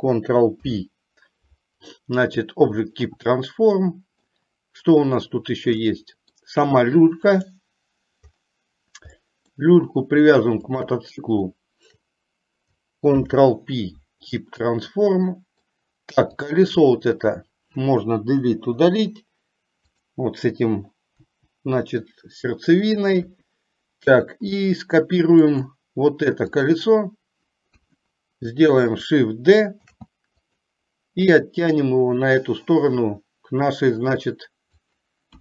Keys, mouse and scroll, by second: 0.6 ctrl+p, 4.0 middle click, 6.0 middle click, 7.5 click, 9.5 middle click, 10.7 shift+click, 13.2 ctrl+p, 15.1 middle click, 16.5 click, 18.7 Delete, 20.1 click, 23.3 KP_1, 24.7 middle click, 25.6 middle click, 26.6 click, 27.8 KP_1, 30.1 shift+d, 32.1-35.1 drag.